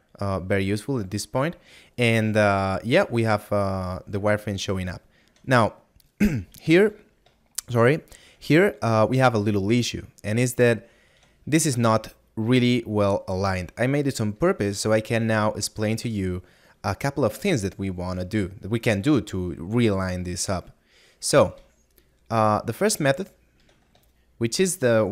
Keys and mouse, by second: 4.9 middle click, 9.9 middle click, 14.3 shift+middle click, 22.0 middle click, 24.3 middle click.